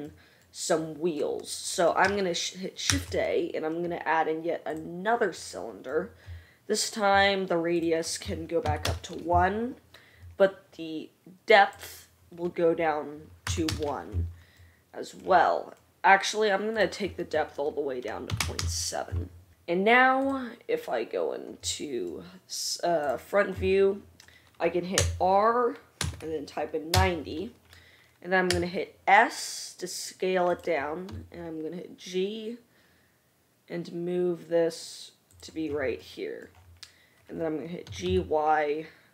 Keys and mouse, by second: 3.0 shift+a, 7.8-8.8 drag, 8.7 middle click, 8.7 right click, 18.6-23.3 drag, 25.1 r, 27.9-39.1 right drag, 28.7 s, 31.2 g, 38.1 g.